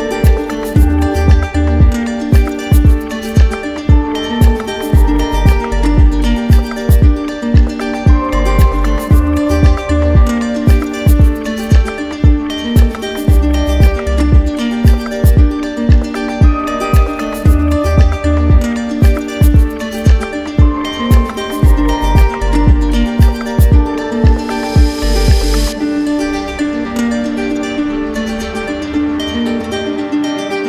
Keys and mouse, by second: 2.6 click, 6.8 click, 10.8 click, 11.9-13.0 drag, 13.5-14.5 drag, 15.4 click, 16.6 click, 17.7 click, 19.1 alt+click, 20.3 click, 21.8 click, 23.1 click, 23.4 shift+click, 24.2 click, 24.8 click, 27.5 click, 30.1 click.